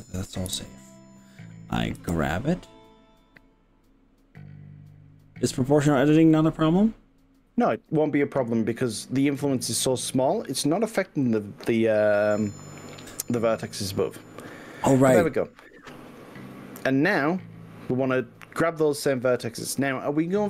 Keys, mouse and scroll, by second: 0.6 KP_1, 2.0 g, 11.3 click, 12.3 click, 16.3-19.8 middle drag, 19.8 drag.